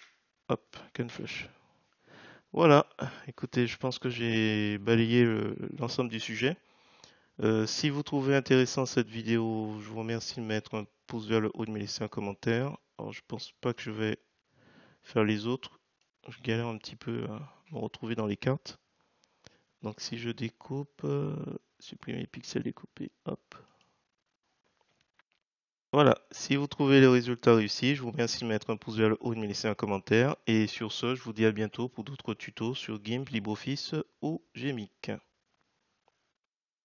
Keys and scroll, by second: 1.1 h.